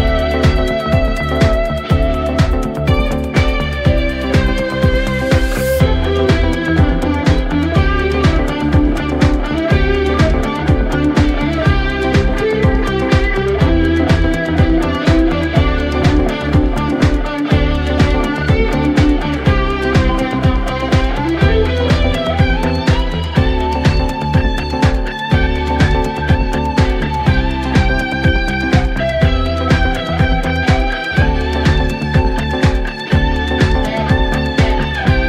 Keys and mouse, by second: 16.8 middle click, 17.4 middle click, 18.8 middle click, 19.8 middle click, 21.0 middle click, 21.3 middle click, 22.6 middle click, 23.0 middle click, 25.7 middle click, 30.2 middle click, 31.3 middle click, 31.5 middle click, 31.8 middle click.